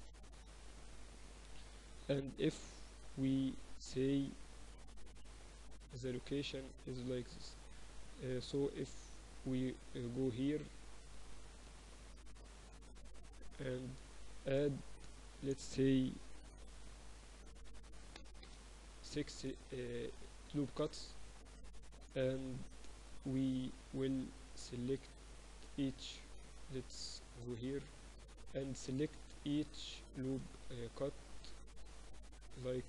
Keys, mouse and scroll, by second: 2.5 ctrl+r, 8.4 right click, 8.9 middle click, 9.0-10.8 drag, 9.0-10.3 right drag, 13.1-15.0 right drag, 14.1 ctrl+r, 20.4-24.0 middle drag, 23.6 a, 24.2-26.2 right drag, 26.0-27.6 middle drag, 26.5 ctrl+r, 32.0-32.8 middle drag.